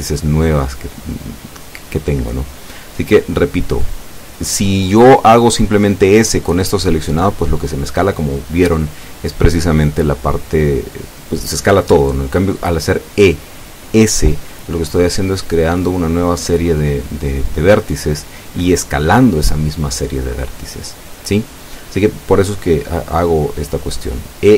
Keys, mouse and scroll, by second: 7.4 ctrl+z, 9.5 ctrl+shift+z, 12.0 s, 13.6 Escape, 19.2 e, 23.8 s.